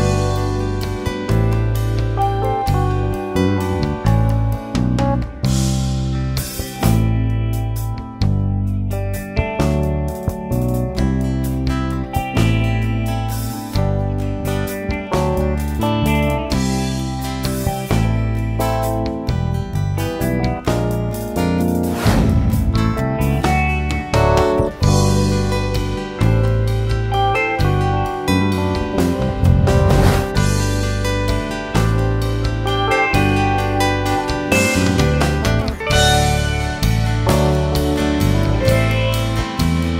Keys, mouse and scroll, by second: 1.1 alt+a, 1.4 scroll down 2, 1.7-3.5 middle drag, 3.5 KP_Divide, 5.2 click, 8.3-8.6 scroll up 3, 8.6-11.8 shift+middle drag, 11.8 click, 12.6 alt+a, 13.5 click, 15.3 click, 16.0-19.8 middle drag, 19.8 click, 21.1 scroll down 3, 21.4-22.9 middle drag, 22.9 click, 24.0 Tab, 24.4 alt+a, 24.6 scroll down 1, 24.7-27.8 middle drag, 28.2-28.8 scroll down 1, 28.8 KP_1, 29.6-30.5 scroll up 2, 30.5-32.6 middle drag, 32.6 scroll down 1, 32.8 middle click, 33.8-34.5 scroll down 1, 34.5-35.1 scroll up 2, 35.1 click, 36.2 Tab, 36.8 alt+a, 37.3 click, 38.4 click.